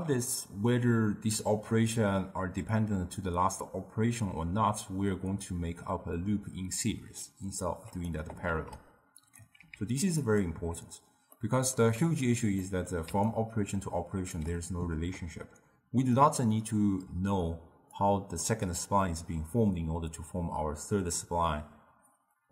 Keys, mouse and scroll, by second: 8.1 click, 8.5 shift+d, 9.6 x, 10.3 click, 10.6 Tab, 11.4-12.0 middle drag, 12.0-12.7 scroll up 1, 12.7 middle click, 13.2 d, 13.3-14.4 right drag, 14.4 d, 15.0 d, 17.1-18.0 d, 18.0-18.5 drag, 18.5 d, 18.7 d.